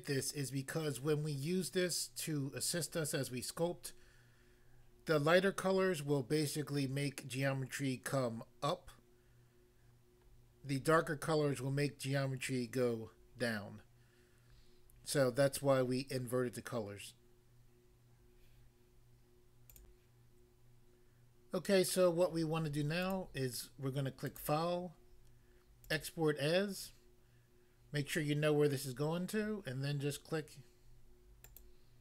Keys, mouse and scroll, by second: 19.8 click, 19.9 click, 23.0 click, 23.1 click, 24.2 click, 24.3 click, 25.9 click, 31.4 click.